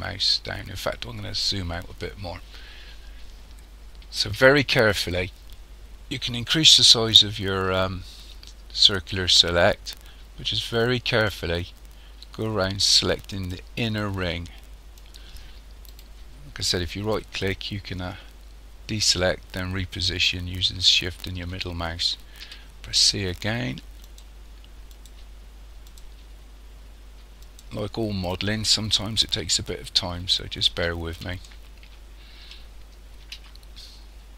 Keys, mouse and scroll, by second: 0.9 scroll down 1, 4.2 c, 16.0 right click, 17.1 shift+middle click, 22.4 c, 29.5 shift+middle click, 33.3 c.